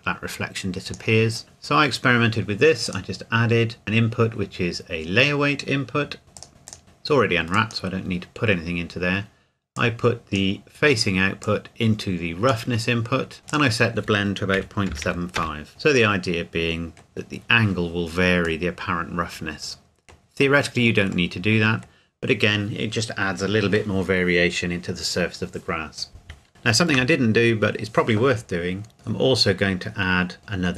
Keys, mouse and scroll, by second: 2.8 click, 6.4 click, 13.5 click, 14.6 KP_Decimal, 14.9 KP_7, 15.0 KP_5, 15.4 KP_Enter, 16.2 middle click, 19.0-22.0 middle drag, 22.0 scroll up 1, 22.0-24.3 scroll down 1, 26.5 shift+middle click, 27.3-28.9 scroll up 1, 29.0-29.8 scroll down 1, 30.4-30.7 scroll up 1.